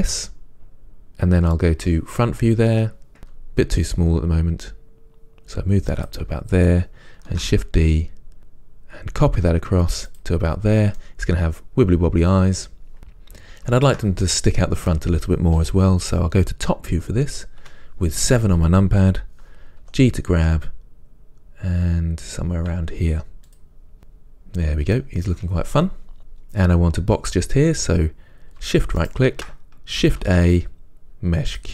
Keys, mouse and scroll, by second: 2.0 KP_3, 3.4 s, 7.5 shift+d, 10.4 click, 11.2-14.1 middle drag, 14.1 shift+click, 17.8 KP_7, 20.1 g, 23.7 click, 24.0-29.2 middle drag, 29.2 shift+right drag.